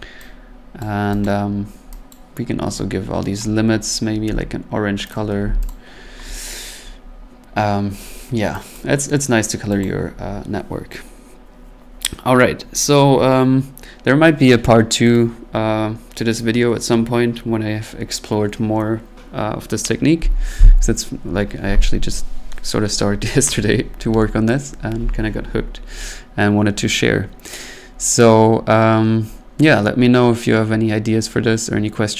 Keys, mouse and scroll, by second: 0.8 click, 1.3 click, 1.6 scroll, 2.1 click, 3.9 right click, 4.3 c, 5.1 click, 5.4 c, 5.7 click, 8.8 click, 9.1 middle click, 9.8 click.